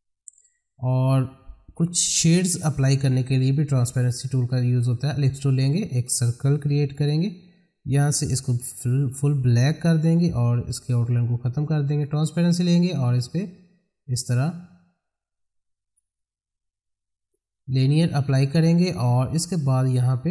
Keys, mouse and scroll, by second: 1.1 click, 5.1-8.3 drag, 9.6 right click, 11.9-18.4 drag.